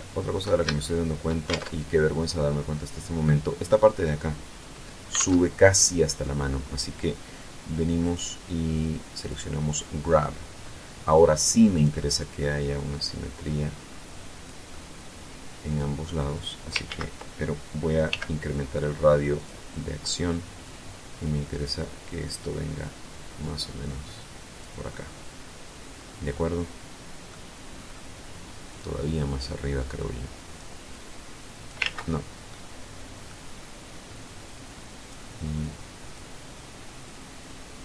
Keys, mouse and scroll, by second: 0.3 shift+middle click, 1.0 alt+shift+Tab, 4.7 alt+Tab, 7.6 click, 8.8 click, 10.1-10.7 scroll down 2, 11.2 click, 12.4-14.2 drag, 14.2-15.8 middle drag, 16.4 ctrl+z, 17.6 f, 18.8 click, 20.1-24.3 drag, 24.4-27.2 middle drag, 27.2-27.6 scroll up 2, 27.6 scroll down 2, 28.2 click, 29.5 click, 30.4 click, 31.3 ctrl+z, 32.0 middle click, 32.9 scroll up 2, 34.0 click, 34.8-35.1 scroll up 2, 35.1 click, 36.5-37.8 drag.